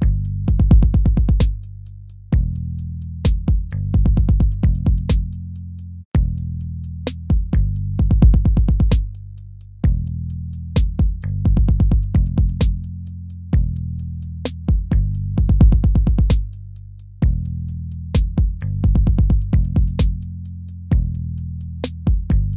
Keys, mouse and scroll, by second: 0.1 ctrl+z, 2.1 BackSpace, 2.3 ctrl+z, 4.0 ctrl+z, 15.7 ctrl+z, 18.4 ctrl+z.